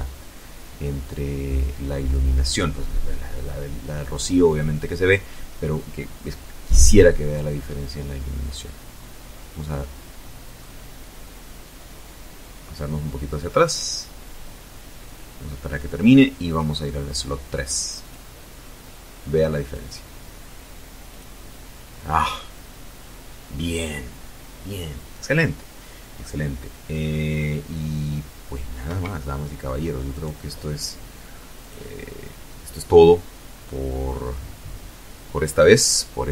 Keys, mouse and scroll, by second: 8.5 scroll down 2, 13.6 click, 15.1 click, 16.7 click, 18.3 click, 25.9 Escape, 27.3 right click, 28.7 click, 32.7 scroll up 1, 33.2-33.9 scroll down 1, 33.9 scroll up 1.